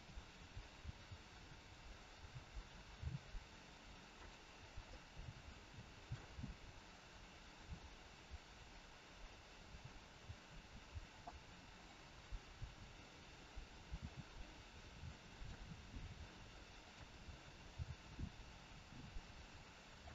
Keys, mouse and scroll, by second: 0.6 click, 2.2 click, 3.0 g, 4.8 middle click, 6.6 scroll down 1, 7.8 scroll down 2, 11.8 click, 14.0 r, 16.8 click, 17.6 g.